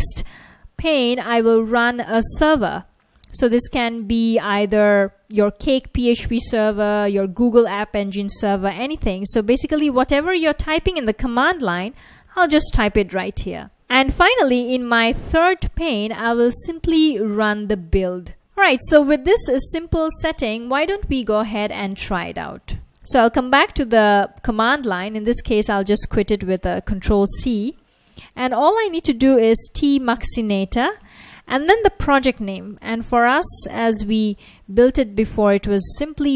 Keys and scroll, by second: 0.0-3.6 typing, 9.1-14.2 typing, 14.6 Return, 15.9-17.7 typing, 18.1 super+s, 21.7 super+Tab, 26.4 F1, 28.9-35.1 typing, 36.1 F1.